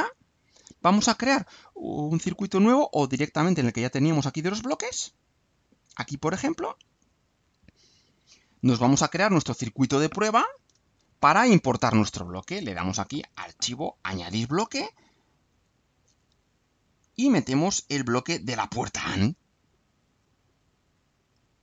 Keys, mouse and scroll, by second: 2.8 click, 5.9 click, 7.1-10.5 drag, 10.7 Delete, 13.9 click, 16.4 click, 17.9 alt+click, 18.9 alt+click, 19.7 alt+click, 21.2 click.